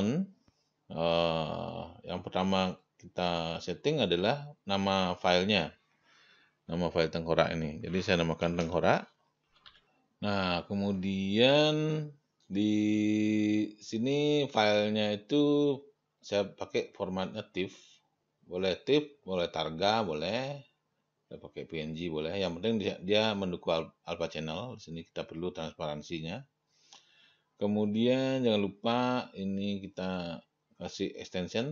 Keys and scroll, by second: 8.7 shift+t, 9.0 e, 9.7 n.